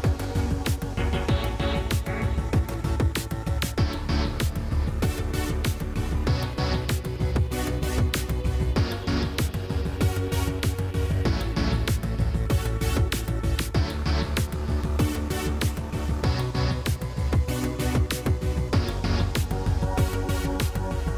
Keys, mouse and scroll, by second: 3.7 click, 4.4-5.6 middle drag, 5.6-6.3 drag, 6.3 middle click, 7.0 click, 7.7 middle click, 8.1-8.8 drag, 9.6 click, 10.2 Tab, 10.5 a, 10.7 a, 11.9-12.7 drag, 12.7 a, 13.4 click, 16.3-17.0 drag, 17.1-19.1 middle drag, 19.1-19.9 drag, 21.1 click.